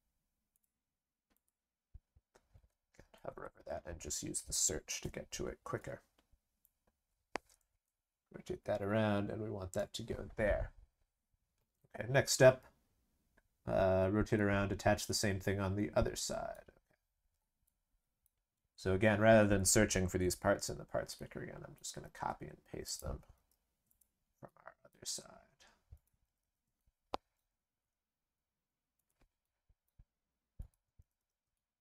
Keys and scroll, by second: 20.4 ctrl+c, 21.9 ctrl+v, 23.3 ctrl+v, 26.2 ctrl+c, 26.4 ctrl+v, 31.0 ctrl+c, 31.1 ctrl+v.